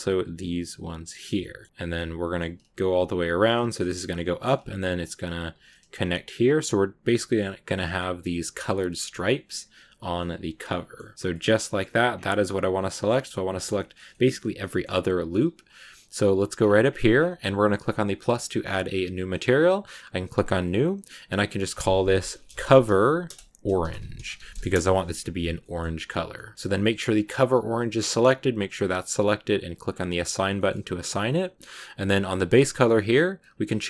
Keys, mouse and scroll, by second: 0.1 shift+right click, 1.0 shift+right click, 1.3 middle click, 1.8-3.1 middle drag, 3.1 shift+right click, 3.3 scroll down 2, 3.4 shift+middle click, 3.8 scroll up 1, 4.0 middle click, 4.7 shift+right click, 5.4 shift+right click, 5.6 middle click, 5.8-6.5 scroll up 2, 6.5-8.1 shift+right drag, 8.4 shift+right click, 8.6 middle click, 9.2 shift+right click, 9.8 shift+right click, 10.1-12.0 middle drag, 12.0 scroll down 2, 12.1-14.0 middle drag, 14.0-14.5 scroll up 3, 14.5-16.4 middle drag, 16.4-18.8 scroll up 10, 18.8-24.4 drag, 25.5-26.5 middle drag, 26.5-27.6 scroll down 1, 27.6-29.8 middle drag, 29.8 click, 30.4 middle click, 30.6 Tab, 31.7-32.5 scroll down 2, 32.5-33.8 drag.